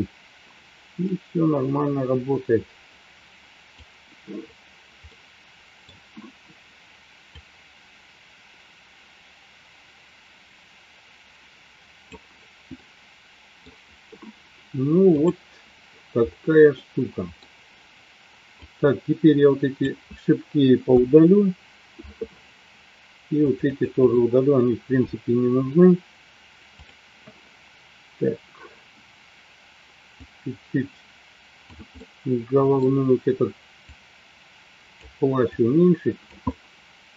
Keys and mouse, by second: 1.3-4.6 drag, 5.1 middle click, 7.7-12.6 drag, 12.7 middle click, 15.3-15.7 drag, 16.7 middle click, 18.4-19.8 drag, 20.8 Delete, 23.6 click, 30.2-31.6 drag, 32.0 middle click, 33.8-35.1 drag, 35.5 click, 36.5-37.1 middle drag.